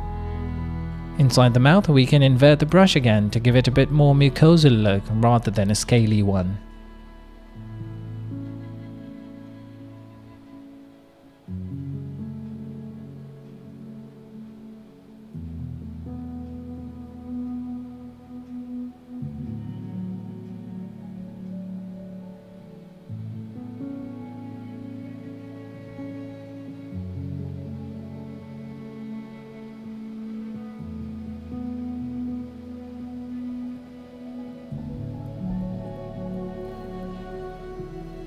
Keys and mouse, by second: 0.8 ctrl+z, 1.7 click, 2.6 click, 3.4 click, 4.8 middle click, 5.6 middle click, 6.0 click, 8.1 ctrl+click, 9.1 shift+middle click, 9.2 middle click, 10.1 click, 11.2 click, 11.8 click, 12.3 shift+click, 12.5 right click, 12.8 KP_3, 14.2 click, 18.3 middle click, 20.6 shift+middle click, 21.2 click, 22.2 ctrl+alt+shift+click, 22.9 shift+click, 23.6 click, 23.9 middle click, 24.8 middle click, 25.3 middle click, 27.1 shift+middle click, 27.6 shift+middle click, 28.1 click, 29.2 middle click, 29.8 middle click, 30.8 middle click, 31.3 middle click, 31.8 middle click, 32.7 middle click, 33.3 ctrl+z, 33.4 click, 35.1 click, 35.4 click, 36.4 click, 37.4 ctrl+z, 37.6 click, 37.8 shift+click, 38.0 shift+click, 38.2 click.